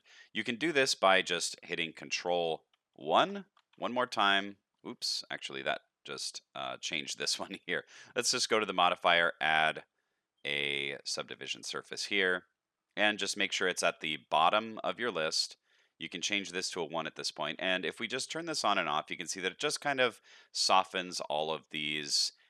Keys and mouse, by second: 1.0 click, 1.9 click, 3.0 ctrl+1, 7.9 click, 8.4-12.3 drag, 13.6 shift+middle click, 16.2 click, 17.0-17.5 shift+middle drag, 20.7 shift+middle click.